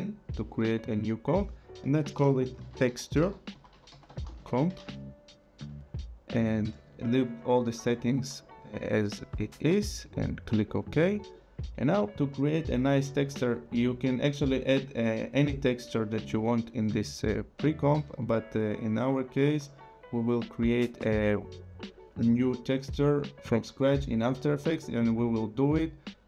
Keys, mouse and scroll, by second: 1.9-5.7 typing, 10.0 click, 25.0 right click.